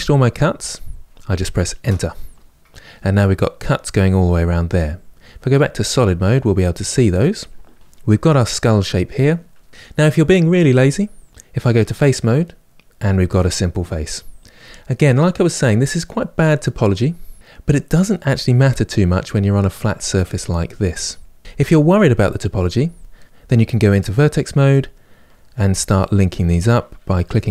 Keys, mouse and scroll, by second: 5.7 click, 7.8-10.6 middle drag, 11.5 3, 12.1 click, 12.7-18.2 ctrl+middle drag, 21.4 middle click, 23.8 1, 24.2-26.9 middle drag, 26.9 click, 27.3 middle click.